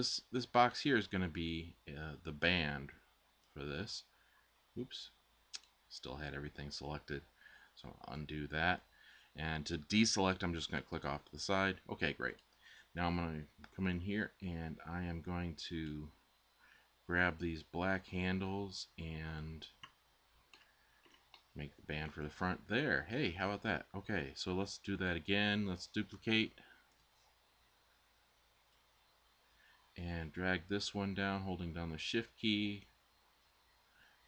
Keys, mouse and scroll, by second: 7.7 Tab, 7.7 z.